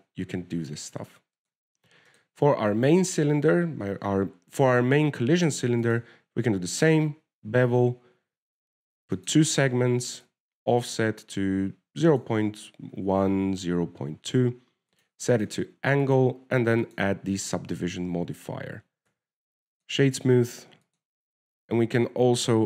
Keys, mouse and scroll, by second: 0.7 click, 1.1 click, 2.7 click, 3.4 right click, 3.9-4.2 scroll down 3, 4.2 shift+middle click, 7.1 click, 10.5 click, 11.6 click, 16.2 click, 16.6 click, 17.3 click, 18.7-20.3 scroll down 1, 20.3-21.8 scroll down 4, 21.8 w, 22.1 click.